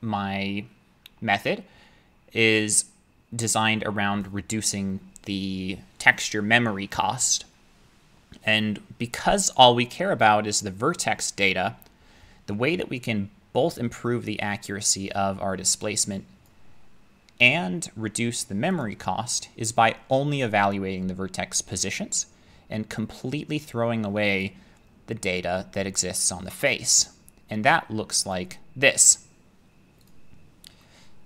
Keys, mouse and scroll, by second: 16.5-18.8 drag, 24.5-26.2 drag, 28.3 click, 30.1 click.